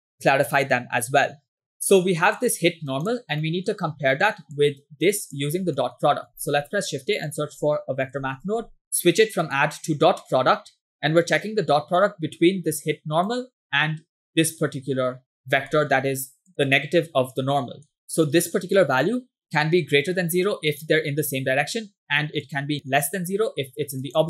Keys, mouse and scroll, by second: 2.4 click, 3.5 middle click, 3.9-4.3 scroll down 2, 4.6 click, 5.9 middle click, 6.1 scroll up 1, 6.4 shift+a, 9.5-10.9 drag, 12.0-13.4 drag, 14.3-15.4 drag, 15.7 middle click, 16.0 scroll up 1, 16.5 click, 16.8 click, 17.9 middle click, 18.0 scroll down 2, 18.0 x, 18.6-20.9 drag, 22.5-24.2 drag.